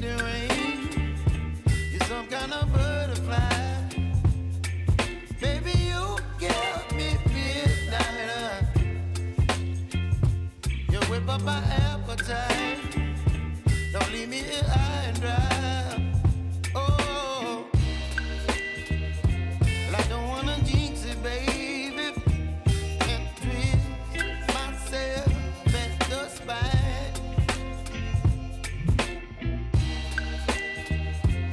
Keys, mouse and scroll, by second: 4.9 click, 14.2 Return, 15.3 click, 17.6 =, 18.9 click.